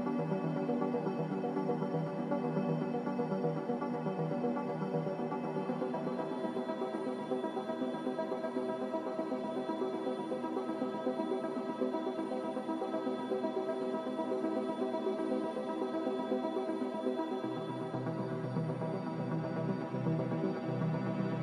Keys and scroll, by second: 2.3 n, 8.7 a.